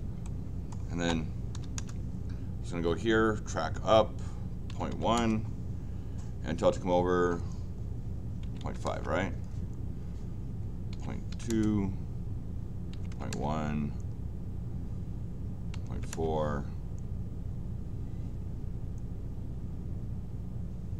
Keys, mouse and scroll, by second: 0.2 middle click, 1.5 l, 1.7 Return.